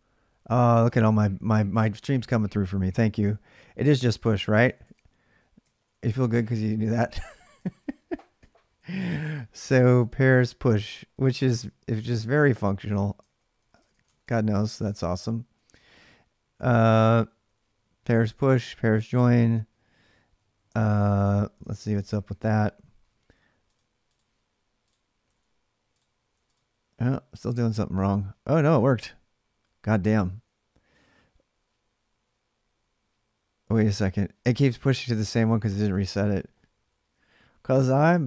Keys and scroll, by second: 3.6-6.3 typing, 5.4 ctrl+[, 7.4 ctrl+[, 7.6-16.3 typing, 12.1 ctrl+[, 18.8 ctrl+[, 19.0 k, 19.2 k, 20.5-21.3 typing, 21.4 alt+Tab, 24.8-26.6 typing, 34.9 alt+Tab, 37.0 ctrl+[, 37.2 k, 37.3 k, 38.0 k.